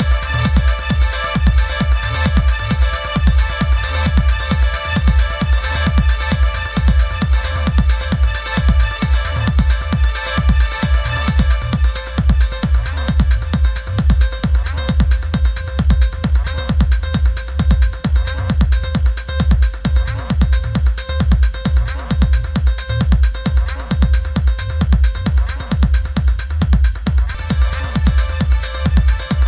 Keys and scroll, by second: 12.6 super+-, 13.5 i, 19.1 super+=.